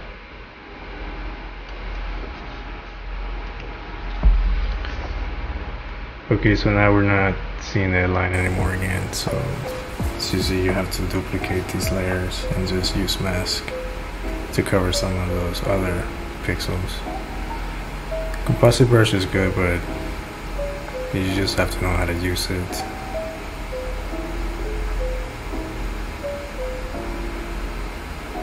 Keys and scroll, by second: 3.5 shift+/.